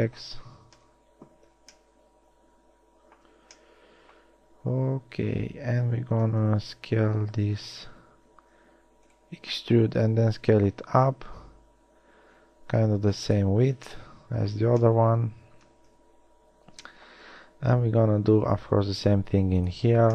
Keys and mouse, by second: 1.0 KP_1, 6.6 KP_3, 8.0 z, 8.7 e, 10.2 s, 14.8 z, 16.1 KP_1, 18.4 e.